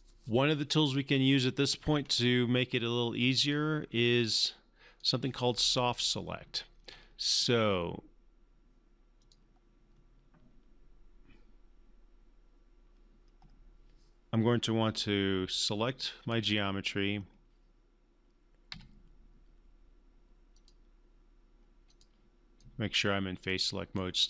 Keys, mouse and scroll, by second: 1.5-2.1 scroll up 1, 3.4-5.1 drag, 9.2 click, 15.6-16.5 drag, 18.8 w, 20.5 click, 22.6-24.1 right drag.